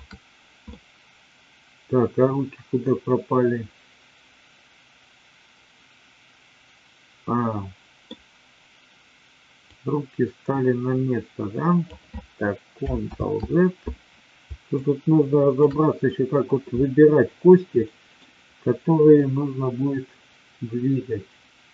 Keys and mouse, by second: 0.6-8.1 middle drag, 9.7-12.0 drag, 13.2 ctrl+z, 14.7-15.7 shift+drag, 17.8-18.2 middle drag, 19.2-21.7 drag.